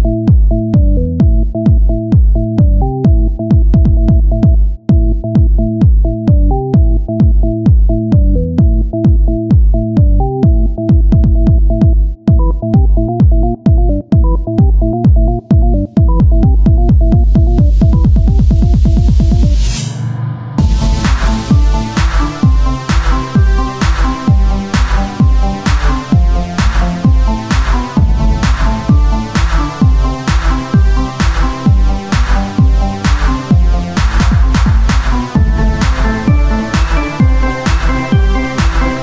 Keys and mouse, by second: 1.1 e, 2.8 KP_1, 3.4 z, 4.4 r, 5.7-6.8 drag, 6.0 z, 6.8 z, 9.0-16.0 drag, 15.0 s, 16.0 z, 16.5-17.7 drag, 16.5 z, 17.7 e, 19.3 KP_1, 19.8 z, 20.3-22.2 drag, 20.3 z, 22.3-24.2 drag, 22.5 s, 24.2 z, 27.2-28.5 drag, 27.2 z, 27.2 KP_1, 27.5 z, 28.5 e, 29.2 s, 30.8-31.9 drag, 31.9 s, 31.9 r, 32.3 z, 34.2-36.4 drag, 36.4 KP_1.